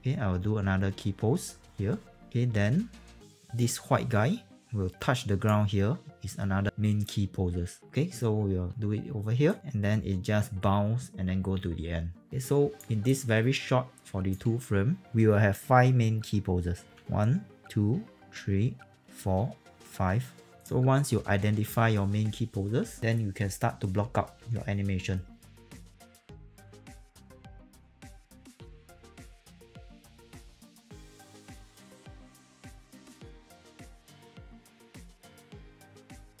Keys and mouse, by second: 1.9 s, 2.3 click, 8.7 s, 9.4 click, 20.6 click, 21.3 click, 25.4 w, 25.4 alt+click, 25.5 alt+middle click, 25.6 w, 25.7 click, 26.3 alt+right click, 26.4 alt+right click, 27.0 alt+click, 27.0-28.8 typing, 27.3 click, 28.1 click, 28.2 alt+click, 28.5 alt+middle click, 28.6 click, 28.9 click, 29.3 click, 29.3 alt+right click, 29.8 click, 30.1-33.8 typing, 30.2 alt+right click, 30.3 click, 30.6 click, 30.8 alt+click, 31.1 click, 31.3 click, 31.8 click, 32.2 click, 32.6 alt+middle click, 32.8 click, 32.9 alt+right click, 33.1 click, 33.2 alt+click, 33.6 middle click, 34.0 click, 34.4 middle click, 34.8 alt+click, 35.0 click, 35.2 middle click, 35.3 e, 35.5 click, 35.6 alt+click, 36.1 f, 36.2 alt+right click, 36.3 alt+click.